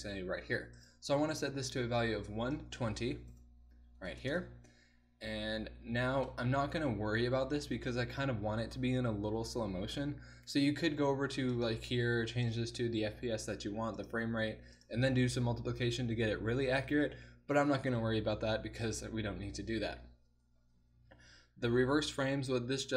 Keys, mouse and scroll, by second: 0.8-2.4 drag, 3.0-11.6 middle drag, 14.3-14.8 middle drag.